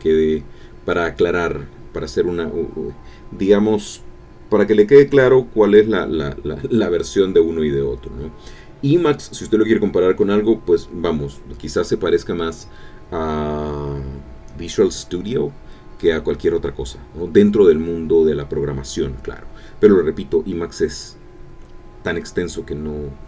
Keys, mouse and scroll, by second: 0.0-16.9 typing, 18.4-19.8 typing.